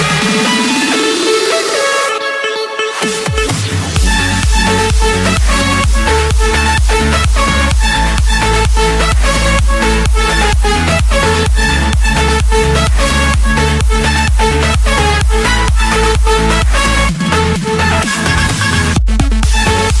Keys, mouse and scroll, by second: 1.1-2.2 drag, 3.8 Escape, 4.7-5.8 right drag, 7.7 click, 8.6 click, 9.3 Return, 11.4 click, 12.3 click, 12.7-13.4 scroll, 14.6 click, 15.5 Escape, 16.3 click, 18.5 click.